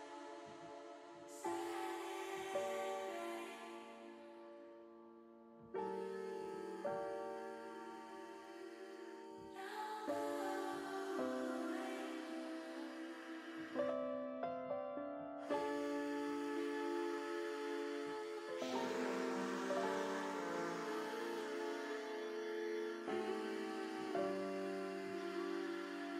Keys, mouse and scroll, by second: 0.5 a, 1.3 a, 1.9 click, 2.3 middle click, 3.2 a, 4.4 click, 5.3 l, 5.8 middle click, 8.5 click, 9.4 click, 10.4-13.8 drag, 15.1 click, 19.3 click, 20.7 middle click, 24.3-25.3 middle drag.